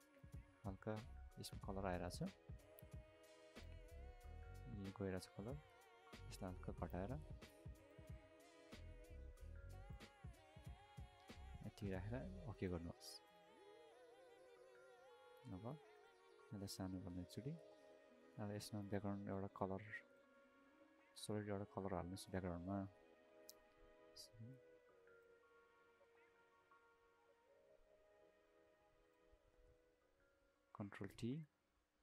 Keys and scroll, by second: 15.1 ctrl+alt+space, 31.0 ctrl+t.